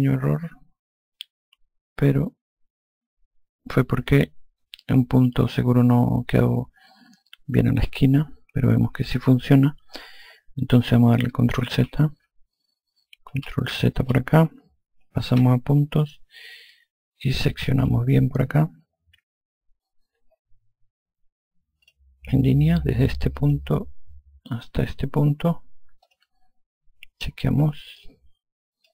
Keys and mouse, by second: 13.6 ctrl+z, 17.0 alt+click, 22.1 click, 23.6 click, 26.3 click, 28.2 alt+click.